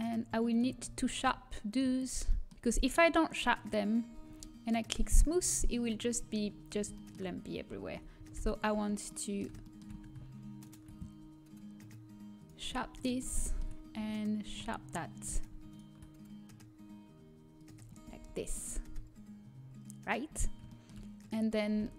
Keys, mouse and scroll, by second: 0.4 right click, 0.8-4.0 middle drag, 4.0 a, 4.2 Tab, 5.0 click, 5.5-7.9 middle drag, 7.9 Tab, 8.6-11.7 middle drag, 9.1 right click, 11.7 right click, 12.6-14.2 middle drag, 13.4 click, 13.4 a, 14.4-16.6 drag, 16.6-17.8 right drag, 17.8-19.5 drag, 18.5 Tab, 18.5 a, 19.5-20.6 middle drag.